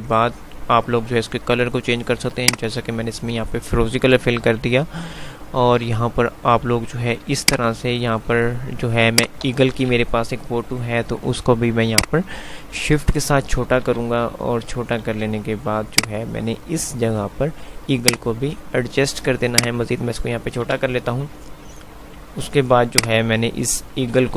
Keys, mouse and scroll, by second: 2.3 click, 2.4 click, 4.3 F3, 7.6-8.6 click, 8.3 F2, 9.3 click, 9.4-9.9 F2, 12.3-13.1 shift+drag, 13.8-15.6 typing, 16.1-17.1 drag, 20.8 typing, 23.1-24.1 click.